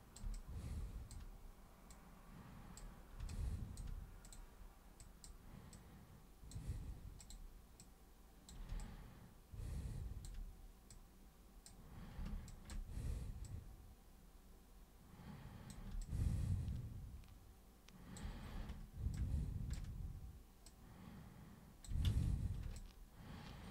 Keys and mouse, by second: 0.3-1.1 alt+super+drag, 1.9 super+click, 3.3-3.8 alt+super+drag, 4.2 super+click, 5.0 super+click, 5.7 super+click, 7.2 super+click, 7.8 super+click, 8.8-10.2 alt+super+drag, 10.9-11.7 super+drag, 12.5 ctrl+shift+super+click, 13.5 super+click, 16.0-18.2 alt+super+drag, 19.1 ctrl+shift+super+click, 20.6-21.8 super+drag, 22.0 ctrl+super+z, 22.8-23.7 alt+super+drag.